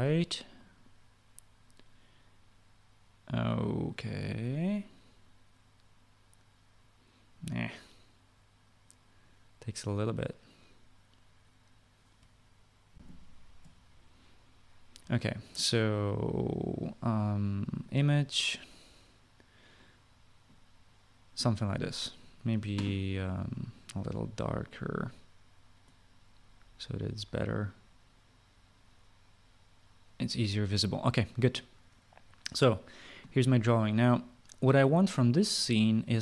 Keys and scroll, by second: 13.6 shift+F9, 13.6 shift+F9.